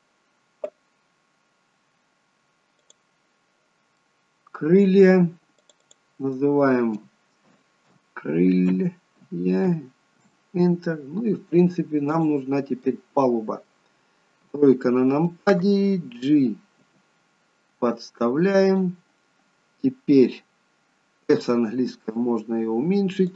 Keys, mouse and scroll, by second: 2.8 click, 3.9 middle click, 5.5 click, 5.7 click, 12.0 click, 12.8 middle click, 14.4 KP_3, 16.7 g.